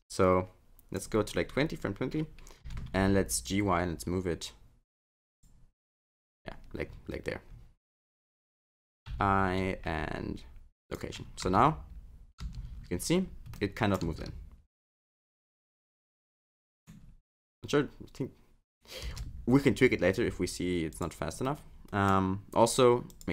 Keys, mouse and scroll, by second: 1.2-2.6 scroll down 3, 2.6 g, 5.8-6.3 scroll down 4, 6.3-6.9 scroll up 5, 6.9-7.5 scroll down 1, 7.5 scroll down 2, 9.1 i, 11.5 space, 12.5 space, 12.7-13.4 scroll up 12, 13.5 middle click, 14.1 space, 16.6 middle click, 17.0 scroll down 3, 19.1 space, 21.0 click, 21.5 middle click, 23.1 click.